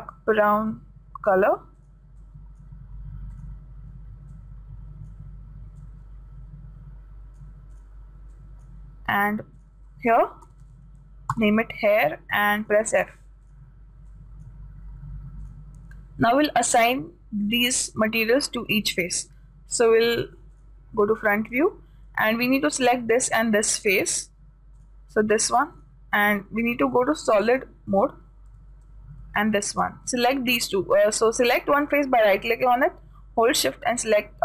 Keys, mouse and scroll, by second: 2.8-5.5 drag, 8.1-11.8 drag, 13.0-17.6 drag, 19.5-21.0 middle drag, 21.8-24.0 drag, 25.2 right click, 27.0-29.1 drag, 29.9 right click.